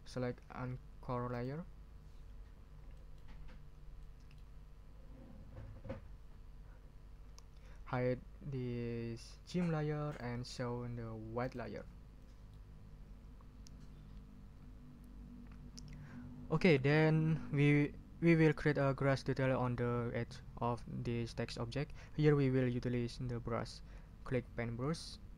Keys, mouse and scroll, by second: 1.3 click, 2.9 ctrl+middle click, 3.5 ctrl+scroll up 2, 4.0 ctrl+middle click, 10.1 middle click, 11.4 click, 12.2 middle click.